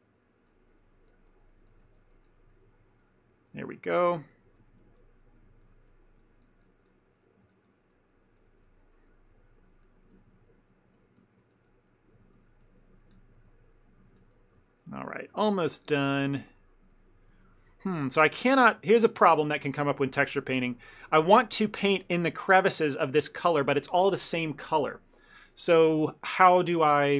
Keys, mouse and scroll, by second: 0.4 ctrl+click, 0.6 ctrl+click, 0.8 middle click, 1.2 ctrl+click, 1.4 ctrl+click, 1.5 ctrl+click, 1.8 ctrl+click, 1.9 ctrl+click, 2.0 ctrl+click, 2.3 ctrl+click, 2.6 middle click, 3.3 middle click, 3.6 ctrl+click, 4.2 ctrl+click, 4.9 ctrl+click, 5.1 ctrl+click, 5.3 middle click, 5.7 ctrl+click, 6.0 ctrl+click, 6.5 ctrl+click, 6.7 ctrl+click, 7.3 middle click, 7.6 ctrl+click, 7.7 ctrl+click, 8.0 middle click, 8.5 ctrl+click, 8.7 shift+middle click, 9.0 middle click, 9.5 middle click, 9.9 ctrl+click, 10.2 ctrl+click, 10.6 middle click, 11.3 ctrl+click, 11.6 ctrl+click, 11.8 ctrl+click, 12.0 middle click, 12.4 ctrl+click, 12.7 ctrl+click, 13.0 ctrl+click, 13.2 ctrl+click, 13.5 middle click, 13.9 middle click, 14.3 ctrl+click, 14.4 ctrl+click, 14.6 shift+middle click, 14.9 middle click, 15.1 ctrl+middle click, 15.4 shift+middle click, 15.7 ctrl+middle click, 16.0 ctrl+middle click, 16.6 ctrl+middle click, 16.6 shift+middle click, 16.8 middle click, 17.1 shift+middle click, 17.5 ctrl+middle click, 17.8 shift+middle click, 18.0 middle click, 18.3 ctrl+middle click, 18.8 shift+middle click, 19.2 middle click, 19.8 ctrl+middle click, 20.0 middle click, 20.3 ctrl+middle click, 20.7 middle click, 21.7 shift+middle click.